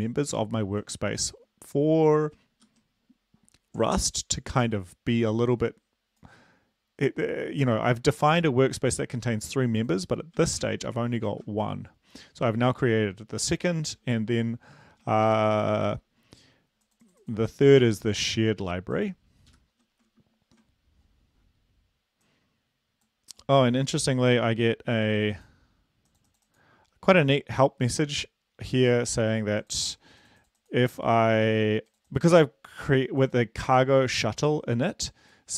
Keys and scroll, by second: 3.0 super+Up, 11.0 ctrl+l, 11.5 ctrl+v, 15.8 super+Left, 20.0 super+Up.